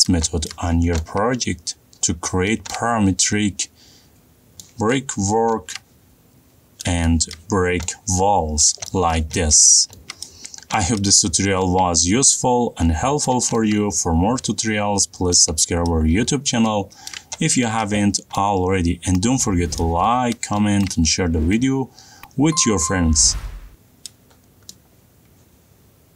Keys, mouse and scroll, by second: 0.6 middle click, 0.7 middle click, 0.9 middle click, 1.2 middle click, 1.3 shift+middle click, 1.6 middle click, 2.0 middle click, 2.2 middle click, 2.3 shift+middle click, 3.7 middle click, 3.7 middle click, 3.9 middle click, 6.5 middle click, 6.8 middle click, 7.0 middle click, 10.2 middle click, 10.2 middle click, 10.7-11.7 shift+middle click, 10.9-11.3 middle click, 12.3 middle click, 12.7 middle click, 13.0 middle click, 13.1 middle click, 13.5 middle click, 14.8 middle click, 15.1 middle click, 15.4 middle click, 15.7 middle click, 15.7 middle click, 15.9 middle click, 16.6 middle click, 17.1 shift+middle click, 17.2 shift+middle click, 17.7 middle click, 18.0 middle click, 18.3 middle click, 18.8 middle click, 19.1 middle click, 19.3 middle click, 19.7 middle click, 21.3 middle click, 21.3 middle click, 23.7 middle click, 24.2 middle click, 24.3 middle click, 25.2 shift+middle click, 25.5-26.1 middle click, 25.8 middle click, 25.9 middle click, 26.1 middle click.